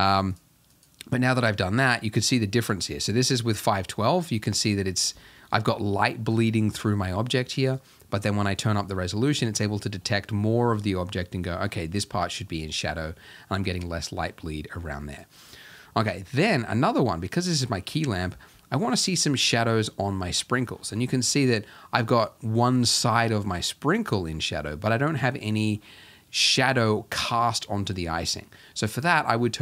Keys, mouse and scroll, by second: 5.3-8.9 shift+middle drag, 8.9 click, 9.3-9.7 scroll down 1, 9.7-11.1 shift+middle drag, 11.1-12.7 scroll up 1, 12.7-18.1 shift+middle drag, 18.1-18.6 scroll up 3, 18.6 shift+middle click, 19.4-20.3 scroll up 1, 20.3-21.3 shift+middle drag, 21.3-22.2 scroll up 1, 22.2-23.4 scroll up 2, 23.4-24.2 scroll up 1, 24.2-25.1 scroll up 1, 25.1 shift+middle click, 25.8-28.4 scroll up 2, 28.4-29.0 scroll up 1, 29.0-29.6 scroll up 1.